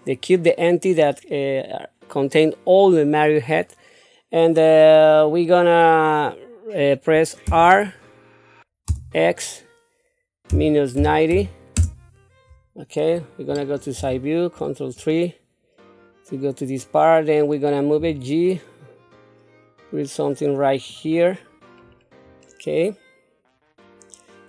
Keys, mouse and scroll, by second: 7.5 r, 13.9 ctrl+KP_3, 18.0 g, 21.8-22.2 scroll down 2, 22.4-24.4 middle drag.